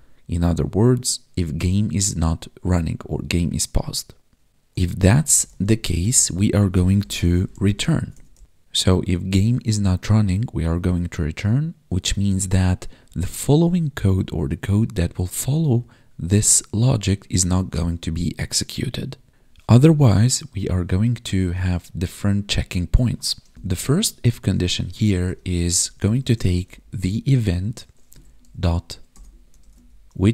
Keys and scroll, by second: 5.2 Right, 7.9 ctrl+s, 23.5 space.